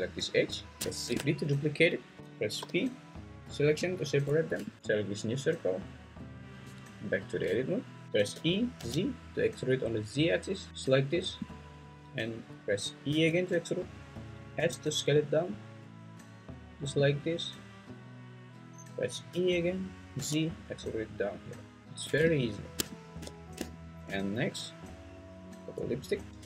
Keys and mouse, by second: 1.0 shift+d, 2.2 Escape, 2.6 p, 4.5 Tab, 6.6 Tab, 8.0 Escape, 8.0 g, 8.3 e, 8.8 z, 13.1 e, 14.6 s, 16.5 click, 19.3 e, 20.1 z, 21.9 click, 22.2 `.